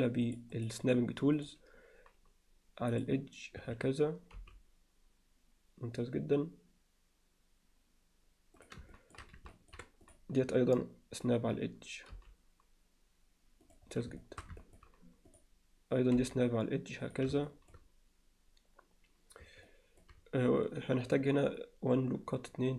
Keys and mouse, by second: 0.3 click, 0.7-1.7 drag, 3.1-3.6 drag, 3.6 Escape, 4.4 g, 8.9 shift+middle click, 9.5 ctrl+alt+middle click, 12.1 g, 14.2 alt+shift+middle click, 14.6 ctrl+alt+middle click, 15.3 click, 16.2 g, 17.5 alt+shift+middle drag, 19.7-20.0 alt+shift+middle drag.